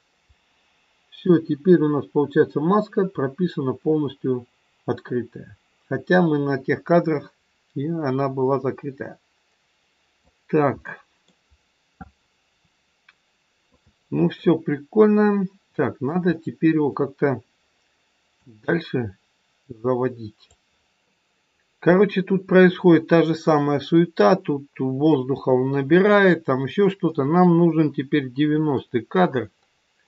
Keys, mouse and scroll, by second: 1.2 click, 10.8 middle click, 11.5 scroll down 2, 13.6 shift+middle click, 13.6 scroll down 3, 14.5-15.1 scroll down 1, 15.1 middle click, 18.4 click, 22.1 middle click, 27.0 middle click.